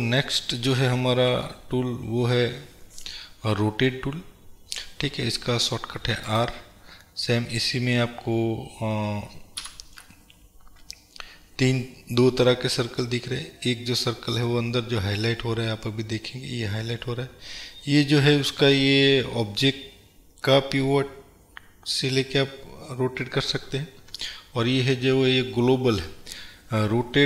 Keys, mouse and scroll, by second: 0.0 click, 1.4 n, 6.4 click, 8.8 scroll up 1, 9.7 KP_Decimal, 11.0-12.0 scroll down 1, 13.0 scroll up 1.